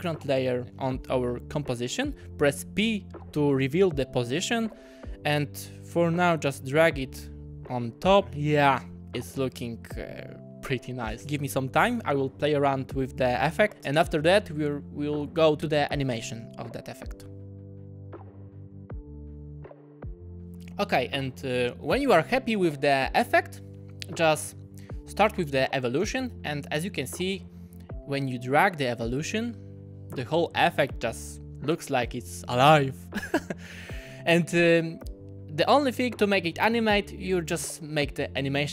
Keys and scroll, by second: 2.6 p.